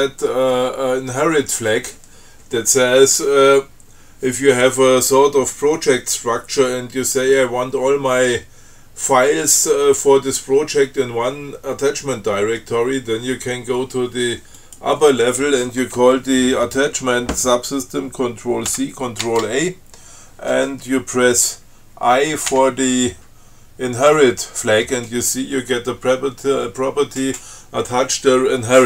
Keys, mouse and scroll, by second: 14.8 click, 18.9 ctrl+c, 19.5 ctrl+a, 22.8 i.